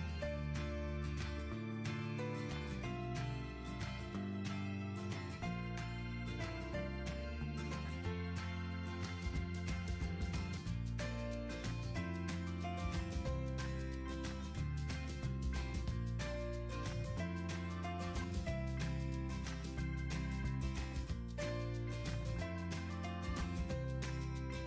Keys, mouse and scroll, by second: 12.6 2, 19.2 3.